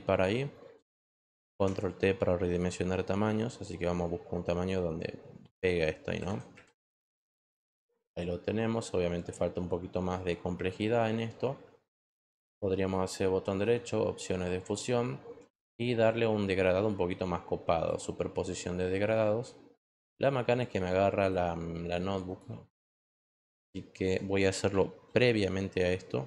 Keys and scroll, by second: 1.5 ctrl+t, 6.9 Return, 25.1 ctrl+z.